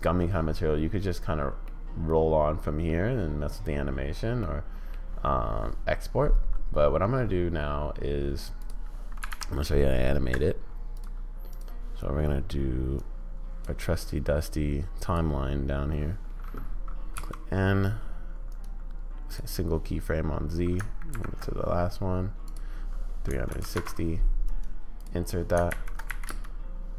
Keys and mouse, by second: 1.7-2.9 middle drag, 4.4-4.9 middle drag, 11.5 click, 13.0 click, 14.5 click, 17.2 n, 18.7 click, 21.1 shift+Right, 22.5-23.7 drag, 25.7 shift+Left, 26.2 space.